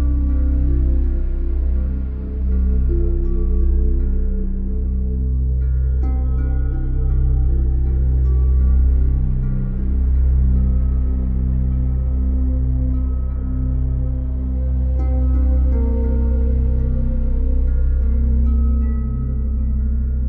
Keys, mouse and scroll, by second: 1.7 middle click, 2.2-4.1 scroll, 4.1 middle click, 5.9 middle click, 7.4 alt+right click, 8.6 alt+click, 9.7 click, 10.0 scroll, 13.8 scroll, 14.8 scroll, 17.9-19.0 scroll, 19.0 alt+click.